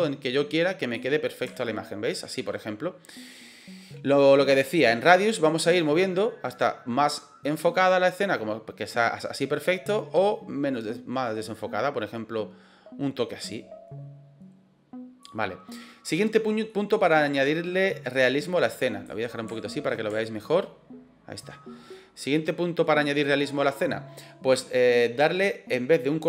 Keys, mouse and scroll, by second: 1.4 shift+middle click, 5.1-15.1 drag, 16.7-17.1 middle drag, 18.1 click, 19.4-19.8 shift+middle drag, 20.0-21.4 ctrl+middle drag, 21.8-22.8 middle drag.